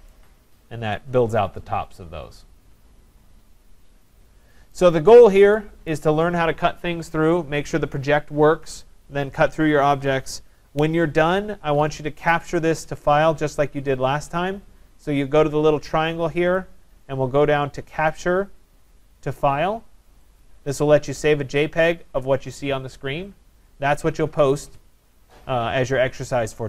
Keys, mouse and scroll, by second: 4.7 right click, 5.2 scroll, 5.9 right click, 11.7 scroll, 12.8 right click, 13.9 scroll, 16.6 click, 20.4 click.